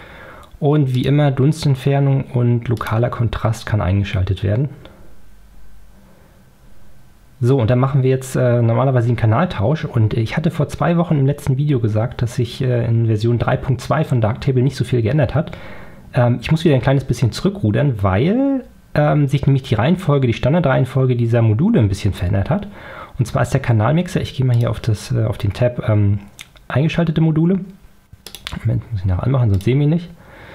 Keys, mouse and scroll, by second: 1.0 click, 2.8 click, 24.6 click, 28.3 click, 29.6 click.